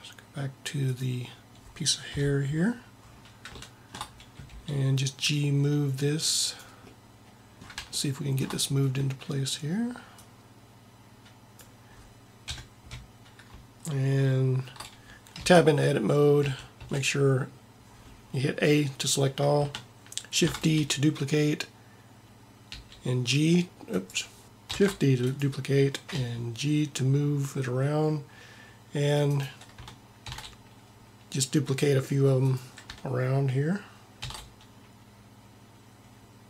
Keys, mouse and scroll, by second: 2.2 KP_7, 4.5 g, 12.5 KP_7, 15.6 Tab, 16.5 a, 16.9 a, 20.5 shift+d, 24.4 ctrl+z, 24.4 g, 24.8 shift+d, 26.3 g, 30.4 shift+d, 34.3 shift+d.